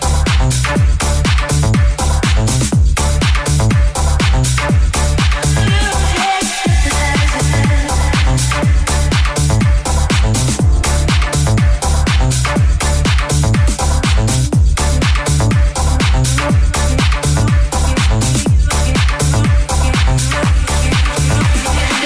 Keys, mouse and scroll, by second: 0.7 middle click, 1.0-2.6 ctrl+middle drag, 2.6 alt+right click, 2.6-6.2 alt+middle drag, 6.2 alt+right click, 6.2-22.0 alt+middle drag, 8.2 g, 13.2 ctrl+z, 13.7 g.